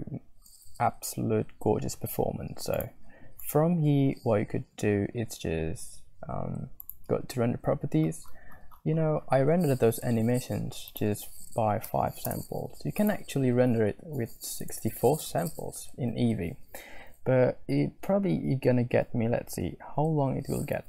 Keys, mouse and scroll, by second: 3.6 click, 7.0 click, 11.0-16.9 drag.